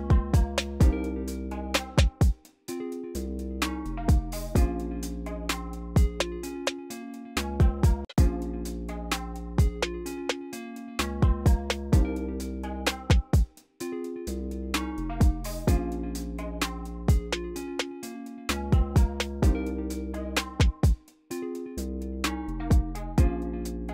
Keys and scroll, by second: 2.8 super+w, 4.4 alt+r, 7.5 alt+r, 7.9 space, 13.6 v, 22.9 super+w, 23.3 super+w.